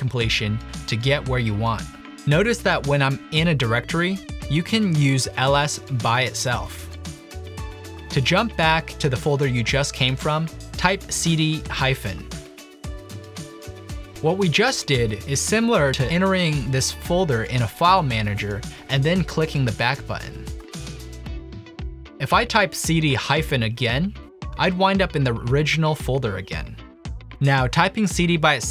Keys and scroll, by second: 1.1 Return, 6.4-7.1 typing, 10.9-12.8 typing, 22.2-23.0 typing, 26.6-27.4 typing.